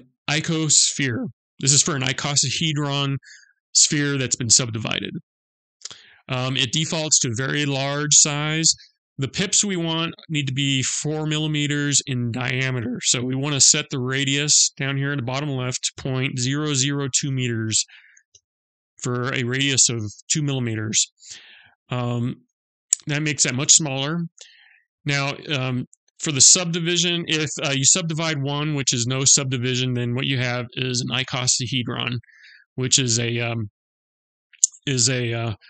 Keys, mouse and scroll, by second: 4.4-5.0 shift+a, 14.6 click, 18.0 s, 26.2 click.